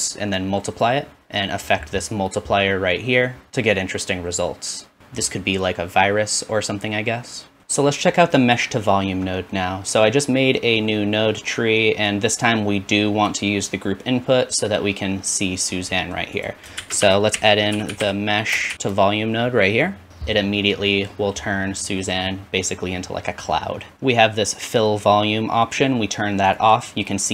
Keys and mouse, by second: 1.2-2.4 shift+drag, 7.6 ctrl+s, 12.1-16.5 drag, 16.8 shift+a, 20.9-22.1 drag, 26.5 click.